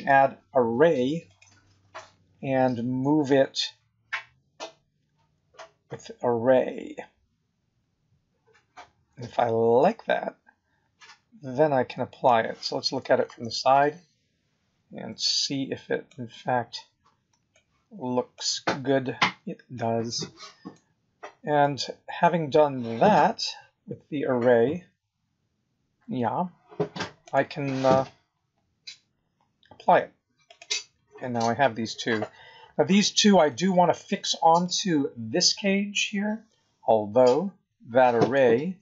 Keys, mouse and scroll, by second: 4.1 click, 13.2 KP_1, 14.0-14.6 scroll up 2, 15.2 shift+middle click, 16.3 scroll up 2, 17.5 shift+middle click, 19.7 middle click, 20.9 scroll down 4, 21.6 middle click, 30.4 click, 34.6 shift+click, 38.2 click.